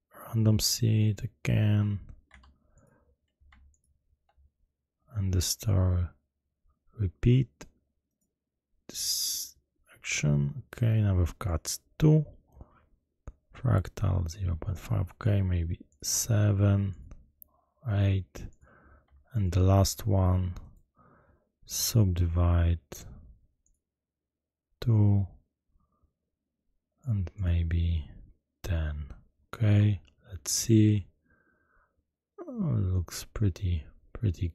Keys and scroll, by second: 2.2 Tab.